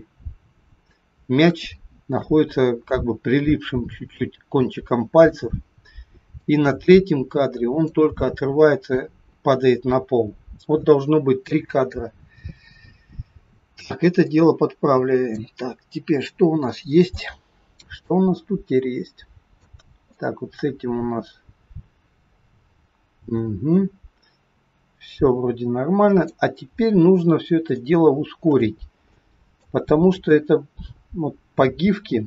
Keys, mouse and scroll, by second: 1.6 shift+middle click, 6.4 click, 8.3 shift+middle click, 13.3-14.2 scroll down 2, 14.2 click, 15.6-16.4 scroll down 3, 16.4 scroll down 2, 16.6 shift+middle click, 18.0 click, 20.1 click, 26.5-27.4 scroll down 10, 27.8 shift+middle click, 29.1 middle click, 30.3 click.